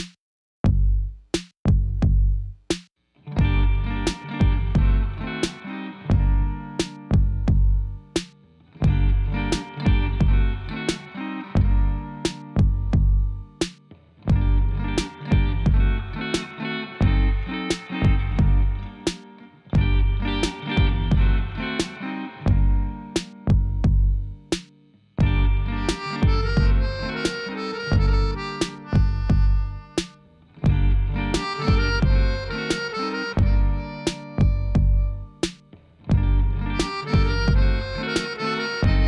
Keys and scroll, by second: 8.1 shift+z, 10.7 shift+z, 12.1 g, 12.5 x, 13.6 g, 13.9 z, 19.8 3, 20.3 Return, 21.1 g, 21.4 z, 22.4 shift+d, 22.7 x, 23.9 g, 24.2 z, 26.9 2, 27.5 Return, 35.7 shift+z.